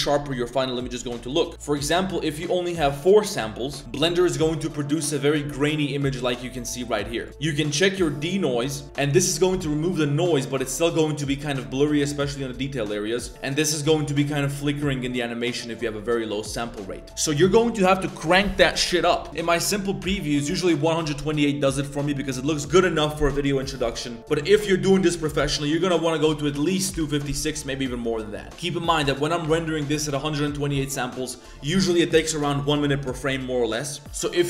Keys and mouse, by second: 1.5-3.3 drag, 19.3-20.8 drag, 25.8-27.0 drag, 28.5-29.9 drag, 34.0 click.